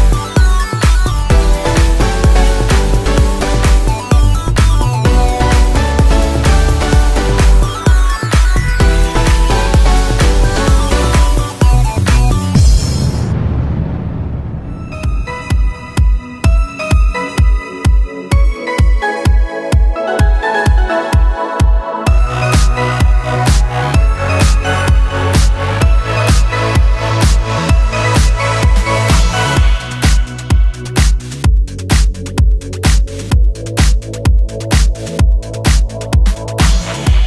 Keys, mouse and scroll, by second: 11.4 click, 11.8 middle click, 13.5 shift+middle click, 13.7 shift+a, 14.8 middle click, 15.3 x, 15.6 shift+a, 16.3-16.7 scroll up 2, 16.7 r, 17.8 s, 19.5 g, 21.2 scroll up 3, 21.5 shift+middle click, 22.1 s, 22.8 Tab, 23.1 shift+middle click, 24.2 i, 29.1 e, 30.8 Tab, 31.0 middle click, 31.8 middle click, 32.1 Tab, 33.2 click, 34.0 click, 34.5 click, 35.7 middle click, 36.6 click, 37.0 click.